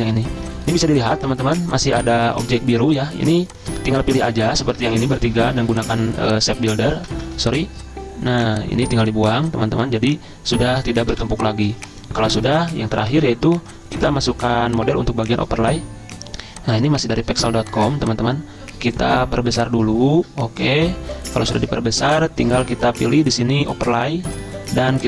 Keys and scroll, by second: 2.4 ctrl+z, 5.0 ctrl+z, 7.2 ctrl+z, 11.1 v, 11.7 z, 13.0 v.